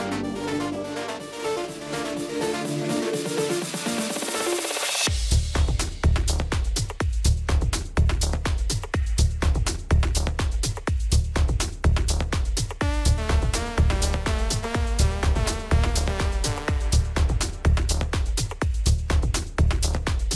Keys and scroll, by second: 1.0-1.6 typing, 4.2 typing, 5.6 alt+space.